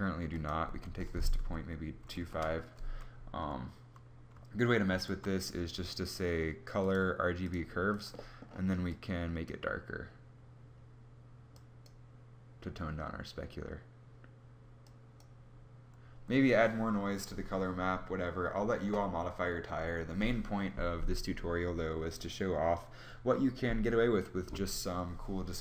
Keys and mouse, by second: 4.4 shift+a.